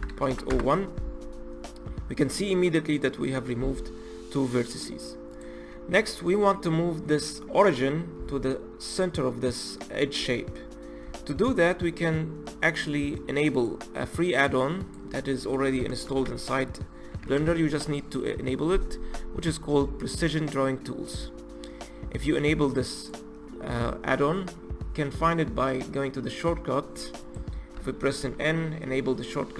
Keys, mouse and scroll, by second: 5.3 click, 10.2 Tab, 12.8-15.9 drag, 27.2 click, 27.8 n, 28.2 n.